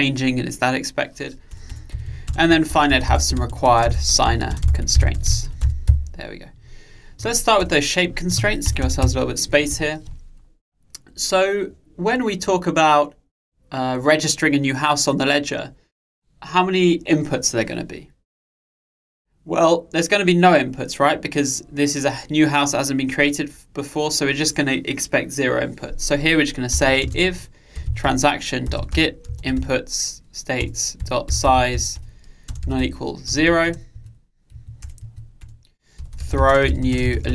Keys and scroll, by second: 30.7 Return.